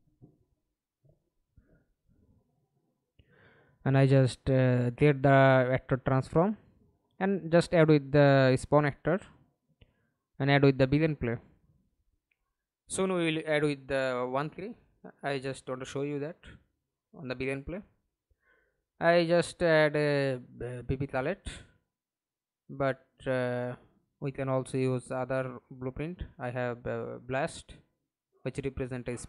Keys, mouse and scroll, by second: 15.1-17.6 typing, 26.7 double click.